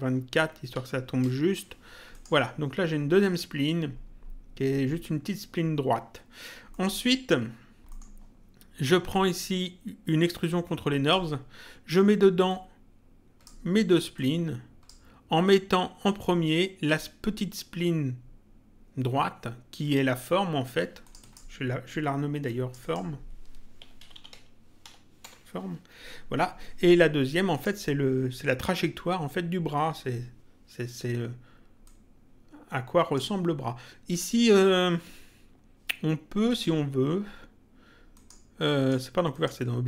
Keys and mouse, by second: 1.2 Return, 2.1 click, 6.6 middle click, 7.8 middle click, 9.1 click, 12.4 click, 14.1 click, 21.0 click, 22.4 click, 23.5-25.3 typing, 27.5 click, 31.8 click, 36.4 click, 38.1 click.